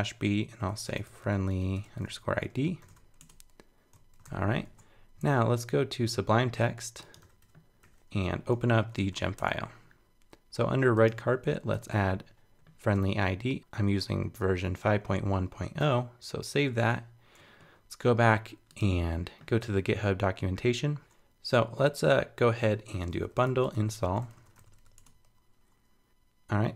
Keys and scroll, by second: 4.2 super+k, 4.7 super+Tab, 7.2 super+w, 8.5 super+t, 11.7 super+v, 15.8 super+s, 16.5 super+Tab.